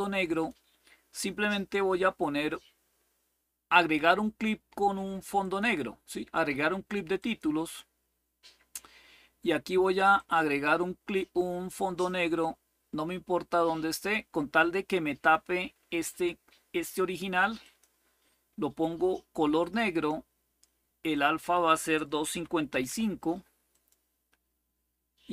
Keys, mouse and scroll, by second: 0.0 click, 5.1 click, 6.9 click, 9.9 click, 11.7-15.1 drag, 17.3 click, 19.3 click, 19.9 click, 20.8 click, 21.9-23.1 typing, 23.4 click.